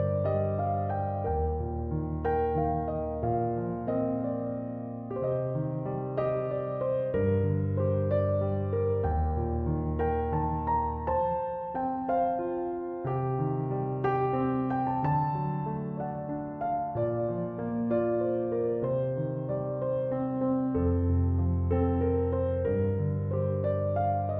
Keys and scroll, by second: 12.4 Escape.